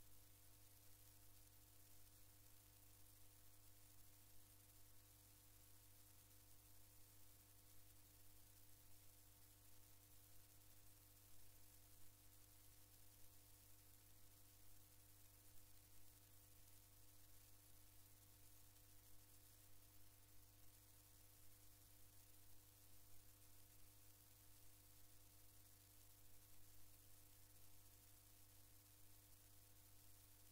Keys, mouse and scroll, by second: 1.2 click, 3.1 click, 6.1 click, 9.2 click, 17.2 click, 18.7 shift+Down, 19.7 shift+Delete, 23.7 click, 28.6 click.